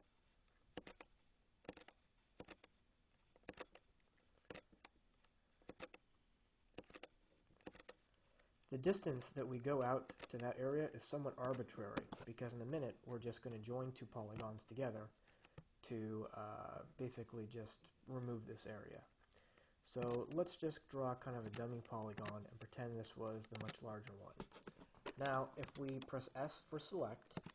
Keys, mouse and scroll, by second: 0.0 click, 1.0 click, 2.0 click, 2.6 click, 3.8 click, 4.7 click, 6.0 click, 6.4 scroll up 1, 6.8 click, 7.9 click, 8.4-9.3 scroll up 1, 9.3 click, 9.8-10.2 scroll up 1, 10.2 click, 11.8 click, 12.2 Escape, 20.3 click, 21.8 click, 22.5 click, 23.9 click, 24.9 Escape, 25.8 s.